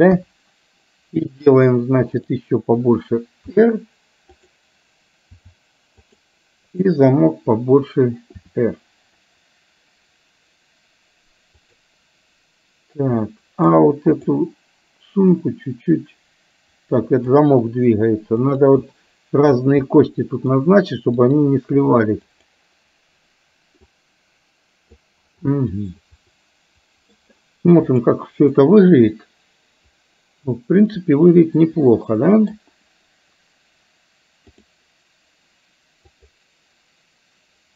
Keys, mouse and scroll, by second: 0.2 KP_1, 2.2 click, 4.6 r, 5.9 r, 6.7 click, 8.6 r, 13.3-13.8 middle drag, 14.3 click, 15.3-17.3 drag, 18.6 click, 19.9 middle click, 21.2 click, 22.3 click, 23.9-25.1 drag, 25.6-26.8 scroll up 1, 26.8 middle click, 27.3-27.9 scroll down 1, 28.7-32.7 middle drag, 34.6 click, 36.1 click.